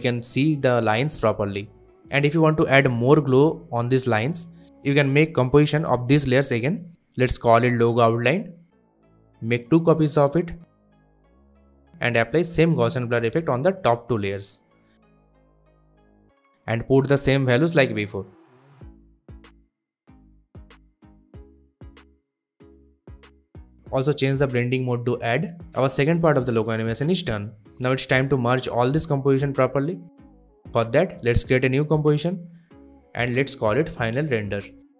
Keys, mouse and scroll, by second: 2.7 right click, 3.4 click, 4.5-8.5 typing, 10.1 ctrl+d, 11.2 click, 11.9 shift+click, 17.4-17.9 typing, 18.5 Return, 19.5 click, 20.8-21.9 typing, 22.5 click, 24.0 shift+click, 26.4 ctrl+alt+scroll down 1, 28.0-29.5 drag, 32.4-34.6 typing.